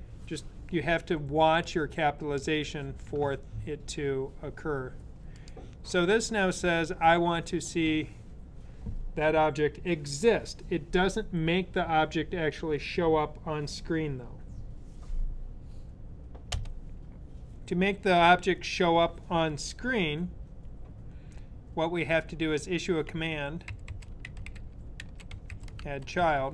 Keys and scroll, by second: 22.8-26.5 typing.